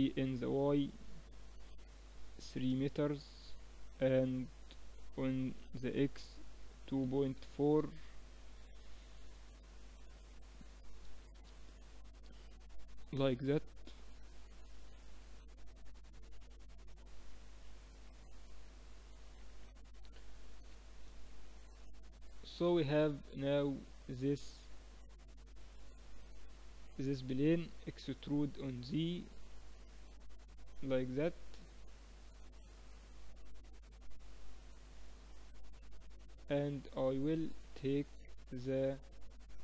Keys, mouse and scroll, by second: 12.8 n, 13.1-15.1 middle drag, 16.4 KP_1, 17.4-19.5 middle drag, 20.4 Tab, 21.5 a, 22.0 a, 25.6-27.5 drag, 27.5-31.2 middle drag, 28.1 e, 35.0-37.2 middle drag, 37.2-38.8 drag, 38.8 middle click.